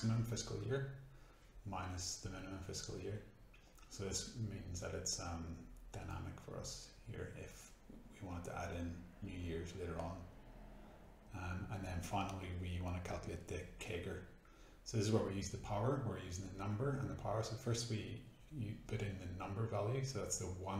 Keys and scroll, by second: 1.0-3.3 typing, 2.4 Tab, 4.3 shift+Return, 5.8-12.4 typing, 17.3-20.5 typing.